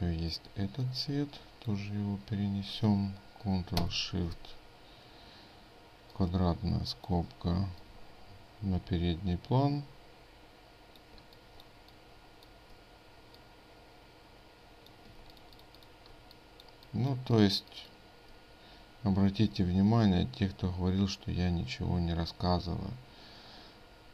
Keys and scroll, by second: 15.2 ctrl+space.